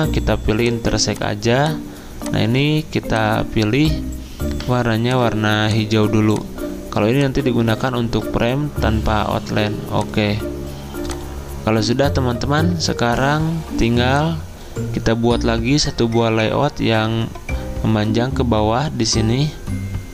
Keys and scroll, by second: 7.7 ctrl+z, 13.8 z.